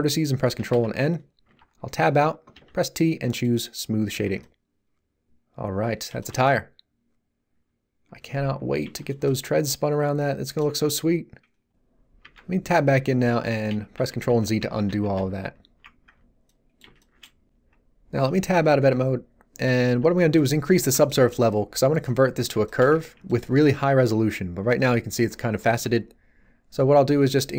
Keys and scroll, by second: 0.5 ctrl+n, 1.4 Tab, 2.5 t, 12.2 Tab, 13.7 ctrl+z, 18.8 Tab.